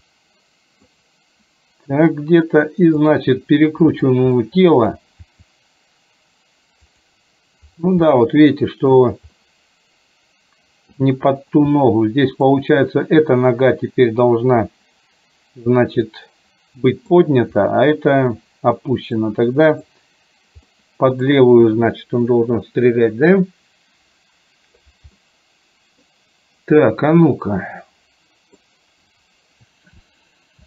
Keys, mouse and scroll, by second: 3.1 click, 3.9 click, 4.5 middle click, 5.4 r, 8.2 middle click, 9.5-11.0 middle drag, 11.9 middle click, 16.2-17.2 middle drag, 17.7-18.4 middle drag, 19.2-19.9 middle drag, 20.7-21.4 middle drag, 22.5-25.0 drag, 25.2-26.1 middle drag, 27.4-28.7 middle drag.